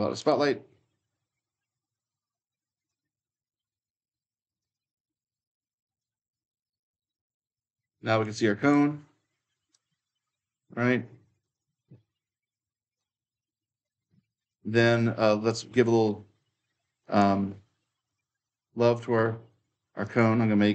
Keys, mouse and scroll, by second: 0.0-8.5 drag, 8.4-9.7 typing, 8.5-11.2 right drag, 11.2-14.3 drag, 14.3-16.8 right drag, 14.4 w, 14.8 w, 16.8-17.9 drag, 17.9-19.8 right drag, 19.8 click.